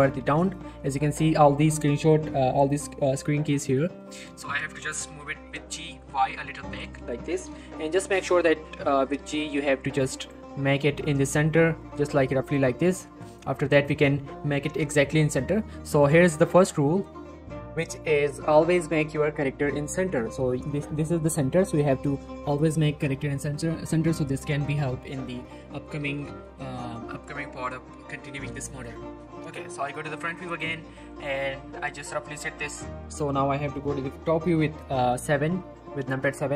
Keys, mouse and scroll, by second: 0.2 z, 0.4 right click, 4.0 middle click, 5.2 g, 5.7 y, 6.8 click, 8.0-8.4 scroll up 1, 8.4 g, 10.2 click, 10.5 click, 10.5 scroll up 1, 11.3-11.8 scroll down 1, 11.8 g, 12.4 click, 12.7-13.0 scroll down 1, 13.2 middle click, 16.0 click, 19.9 scroll up 1, 20.2 middle click, 20.7 scroll down 1, 21.4-22.0 scroll up 1, 22.1 middle click, 24.7 scroll up 1, 24.8 middle click, 25.1 scroll down 1, 25.3 middle click, 25.7 scroll up 1, 26.0 middle click, 26.3 shift+middle click, 31.1 middle click, 31.2 shift+middle click, 32.2 click, 32.5 g, 32.7 right click, 32.9 scroll down 1, 33.0 middle click.